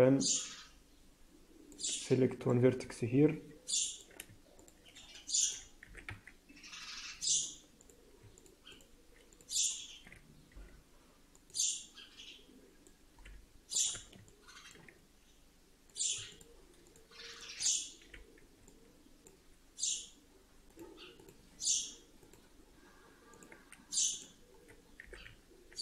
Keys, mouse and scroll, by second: 2.3 click, 2.9 alt+middle click, 4.5 shift+click, 5.1 middle click, 5.7 e, 7.7 click, 8.3 shift+click, 8.6 click, 9.3 click, 9.8-10.1 scroll up 1, 10.4 t, 11.3 click, 11.5 click, 13.0 t, 13.3-14.0 scroll up 2, 14.2 shift+middle click, 15.8 click, 16.2 shift+click, 16.7 click, 17.5 click, 18.0 f, 18.3-18.6 scroll down 2, 18.6 middle click, 20.6 click, 22.1 click, 24.1 click, 24.7 scroll up 1, 24.9 e.